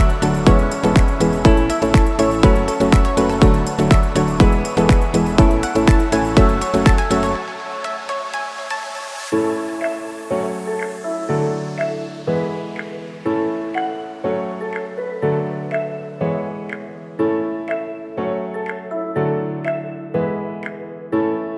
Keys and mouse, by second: 0.0-0.5 drag, 1.8 middle click, 3.5 shift+a, 7.3 click, 9.2 s, 10.6 ., 12.2 s, 15.0 s, 17.1 s, 20.7-21.5 drag.